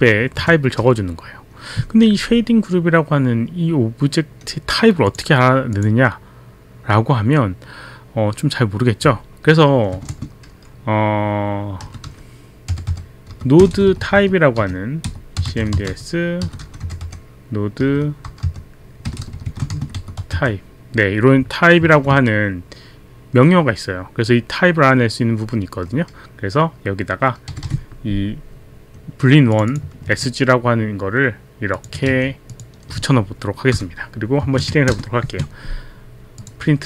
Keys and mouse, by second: 0.3 Left, 5.0 click, 5.7 click, 10.0 Return, 11.6-22.0 typing, 29.5 click, 30.1 ctrl+c, 30.1 click, 31.7 click, 32.1 ctrl+v, 32.1 click, 32.5 click, 33.7 shift+o, 34.5 shift+Up, 34.9 ctrl+Return, 35.4 ctrl+Return, 36.3 click.